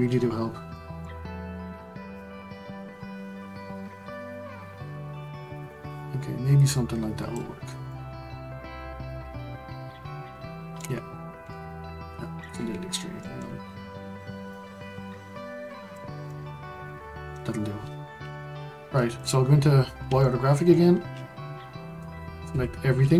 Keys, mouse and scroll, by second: 0.7-2.1 shift+middle drag, 2.1 click, 7.6 scroll down 5, 7.9-13.6 middle drag, 13.6-14.5 scroll up 3, 14.5 click, 16.3-19.1 middle drag, 19.1 click, 19.8-20.2 scroll up 1, 20.2-22.1 shift+middle drag, 22.1-22.4 scroll down 1, 22.4 a.